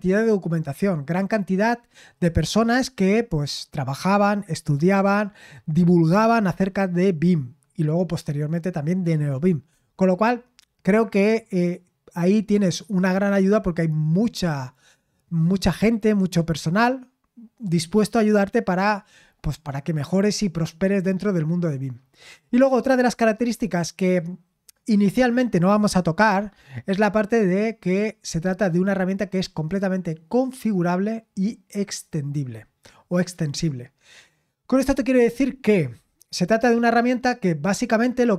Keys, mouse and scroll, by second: 33.6-34.6 scroll down 1, 37.1-38.1 scroll down 1.